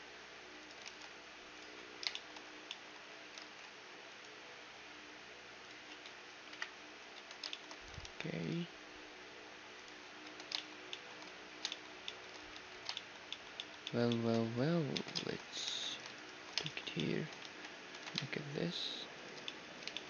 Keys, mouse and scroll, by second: 0.8 ctrl+r, 2.1 middle click, 3.1 click, 3.1-4.9 middle drag, 3.4 ctrl+r, 4.9-5.3 scroll up 1, 5.8-6.9 scroll down 1, 5.9 Tab, 6.4 KP_1, 7.0-9.6 middle drag, 7.1 Tab, 8.0 ctrl+r, 10.2 Tab, 12.5 Tab, 14.4 Tab, 14.9 Tab, 15.6 ctrl+r, 16.1-18.1 right drag, 17.9 ctrl+b, 18.4 middle click, 19.4-20.0 middle drag.